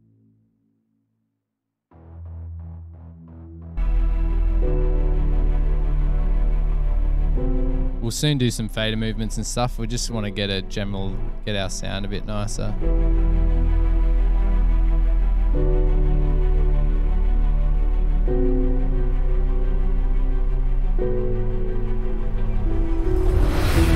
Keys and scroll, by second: 6.3 super+=, 9.9 super+Tab, 13.3 super+Tab, 15.1 super+Tab, 17.6 super+Tab, 19.1 super+Tab, 21.9 super+Tab.